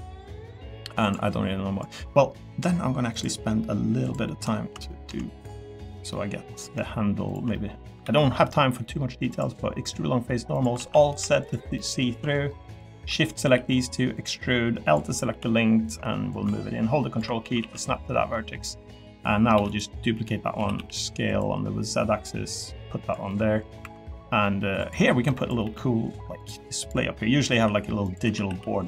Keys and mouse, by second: 0.0 middle click, 1.0 click, 3.1 click, 4.0 click, 4.8-5.8 middle drag, 6.1 middle click, 7.3 shift+click, 7.5 middle click, 8.0 alt+e, 10.5 click, 10.8 alt+z, 11.1 3, 11.4 click, 11.7 middle click, 12.7 shift+click, 13.1 middle click, 13.4 e, 15.3 l, 17.6 alt+z, 17.8 middle click, 18.3 middle click, 19.5 shift+d, 20.5 s, 20.8 z, 23.3 middle click, 23.8 2, 24.4 middle click, 25.2 3, 25.6 e, 26.4 click, 27.5 i, 28.2 s, 28.5 y.